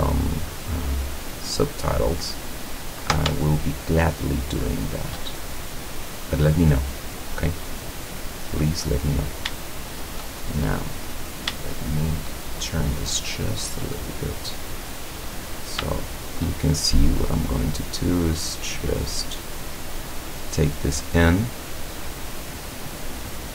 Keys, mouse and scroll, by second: 1.2 click, 2.7 scroll up 2, 3.6-5.2 shift+middle drag, 5.2 shift+scroll up 2, 6.5 right click, 7.6 middle click, 8.2 middle click, 8.9-9.6 middle drag, 10.2 shift+middle click, 10.7 shift+scroll down 1, 11.0-12.5 middle drag, 12.5-13.0 shift+scroll up 1, 13.2-13.9 middle drag, 13.9-14.6 scroll up 1, 15.1 middle click, 16.0-16.6 shift+middle drag, 17.5-21.3 drag, 21.5-22.1 scroll down 3, 23.2 right click.